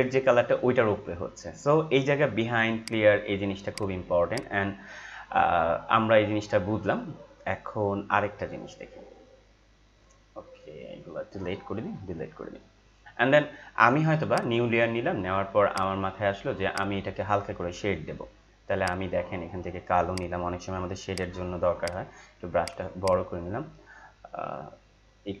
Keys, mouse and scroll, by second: 2.7 click, 2.8-12.0 drag, 12.0 Delete, 14.4 click, 21.8 right click, 22.6-25.4 drag.